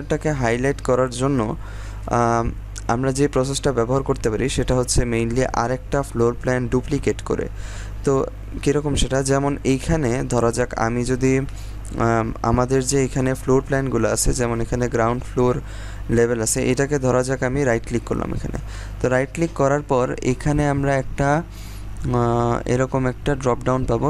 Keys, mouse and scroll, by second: 8.7-9.2 scroll down 1, 9.2 scroll up 1, 17.6 right click.